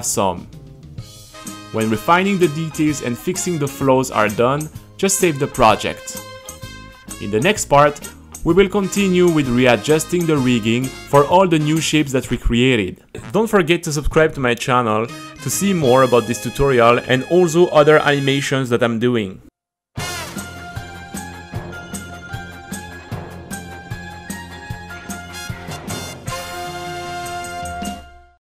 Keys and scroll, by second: 1.9 super+r, 5.6 t, 6.6 z.